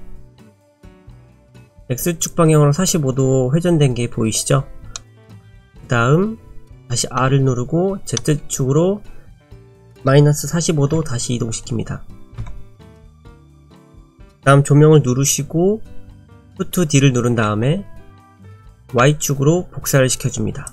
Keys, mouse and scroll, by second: 0.6 middle click, 5.0 middle click, 7.2 r, 13.2 shift+middle click, 17.5 shift+d.